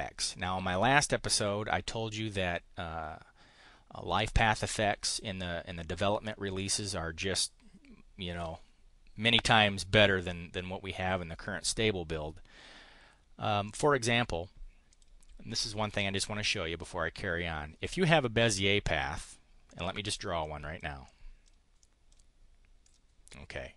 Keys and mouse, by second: 13.6 click, 14.9 click, 19.2 click, 19.6 click, 20.2 click, 20.8 click, 21.6 click.